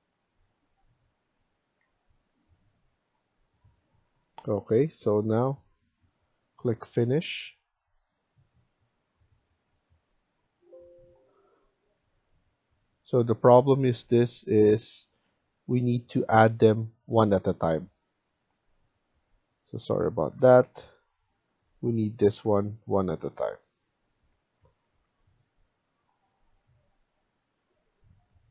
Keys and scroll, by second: 2.5 Escape, 14.3 Escape, 14.7 Escape, 17.9 Escape, 20.3 Delete, 22.3 Delete, 24.5 Escape, 24.7 Escape.